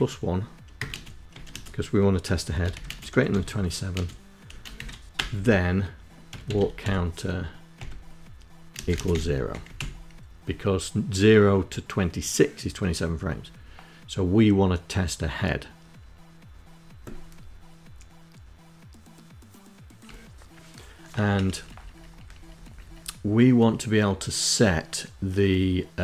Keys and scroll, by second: 0.1 1, 0.4 space, 1.5 shift+., 1.7 space, 2.1 7, 2.8 space, 4.0 Return, 4.9-6.2 typing, 6.6 Tab, 7.6 space, 7.9 0, 8.5 Down, 18.9 Up, 20.5 Up, 20.6 Up, 20.8 Up, 21.1 Up, 21.4 Up.